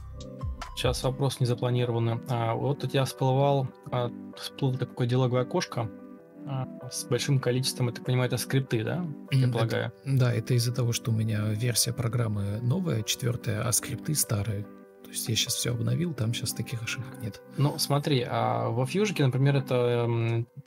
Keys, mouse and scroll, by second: 0.4 ctrl+space, 9.2 ctrl+space, 11.1 ctrl+space, 12.2 ctrl+space, 13.5 shift+click, 14.8 ctrl+space, 16.5 shift+t, 20.4 ctrl+space.